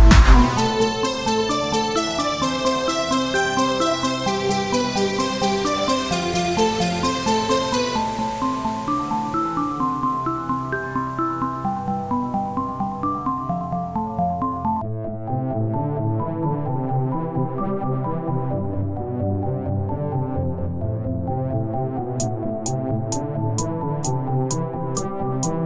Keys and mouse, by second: 6.3-7.4 drag, 7.4 Tab, 8.3 ctrl+Tab, 9.4 i, 12.4 o, 12.8 x, 14.0 KP_1, 15.2 e, 18.1 e, 19.9 KP_3, 21.7-22.9 drag, 22.9 e.